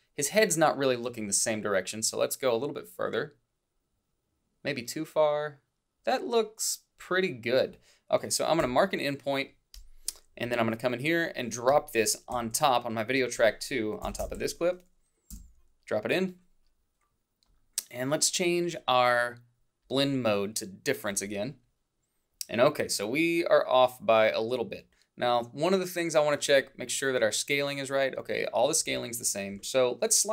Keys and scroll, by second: 14.1 Down, 14.2 Left, 15.3 o.